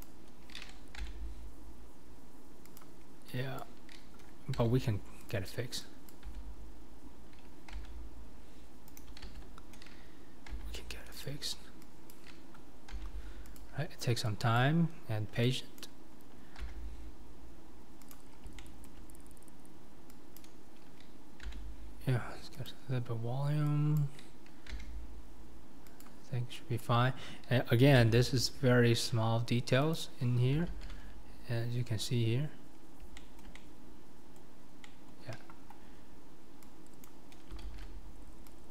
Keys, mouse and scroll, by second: 0.0 click, 1.1 g, 3.6 click, 4.6 g, 6.1 click, 6.3 f, 7.8 g, 9.3 ctrl+z, 10.5 g, 12.1 click, 13.0 g, 14.6 click, 15.8 click, 16.7 g, 18.6 shift+middle click, 20.4 click, 21.5 g, 24.0 click, 24.8 g, 26.8 click, 28.1 g, 30.7 alt+z, 33.2-34.8 shift+middle drag, 34.9 middle click, 37.1 click, 37.6 alt+z.